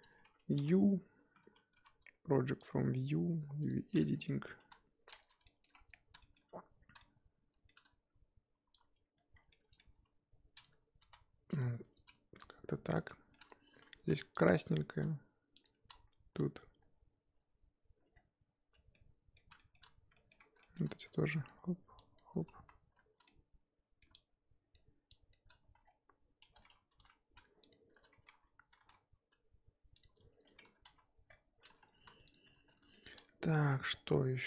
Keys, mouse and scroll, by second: 0.5 y, 1.7 u, 3.6 click, 4.1 scroll down 2, 4.2 middle click, 4.6 KP_1, 5.0-5.4 scroll down 2, 5.4-5.7 shift+middle drag, 5.7-6.2 scroll up 4, 6.2 shift+middle drag, 7.0-9.1 shift+middle drag, 9.1 click, 9.9 g, 10.6-11.0 scroll up 2, 11.0 s, 13.0-13.4 shift+middle drag, 13.4-13.9 scroll up 7, 13.9 3, 14.4 alt+click, 17.6-18.1 scroll up 1, 18.1-18.9 scroll down 4, 18.9-19.8 middle drag, 19.8-20.1 scroll up 2, 20.1 middle click, 20.3 scroll down 1, 20.4-21.4 scroll up 3, 20.6 shift+middle click, 21.4 shift+click, 22.1 shift+click, 22.6 z, 23.2-24.7 middle drag, 24.7 shift+click, 25.3 shift+click, 25.7 z, 25.8-26.9 scroll down 3, 26.9 g, 30.6 Tab, 30.9 z, 31.5-31.9 scroll down 2, 31.9 KP_1, 32.3 click, 32.9 shift+middle click, 33.9-34.4 scroll down 4.